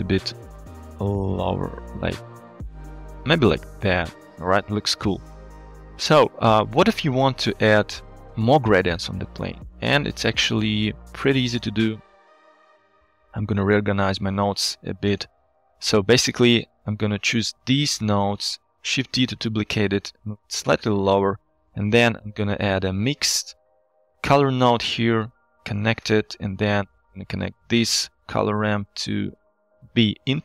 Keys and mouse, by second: 0.2-4.6 shift+drag, 6.5-8.1 middle drag, 10.8 middle drag, 11.6 click, 12.1 click, 12.5 click, 12.9 g, 13.7 drag, 14.4 g, 15.9 shift+middle click, 16.6 shift+middle click, 17.7-18.2 drag, 18.6 shift+middle click, 19.2 shift+d, 21.1 shift+click, 21.5 click, 21.8 shift+a, 28.4 click, 29.0-30.1 drag.